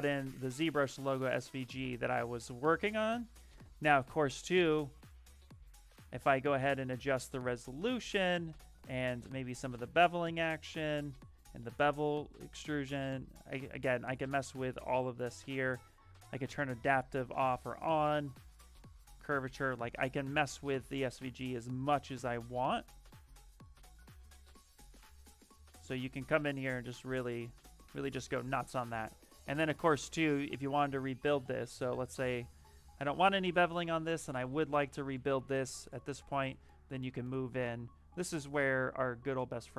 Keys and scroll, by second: 2.7 shift+f.